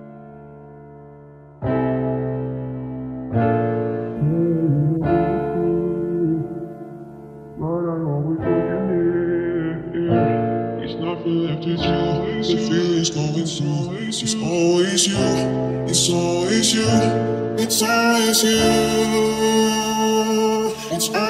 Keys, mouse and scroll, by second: 1.7 c, 4.0-5.8 right drag, 5.0 c, 8.1-9.4 middle drag, 8.4 c, 14.7-17.3 right drag, 17.0 ctrl+s, 18.7-21.2 middle drag.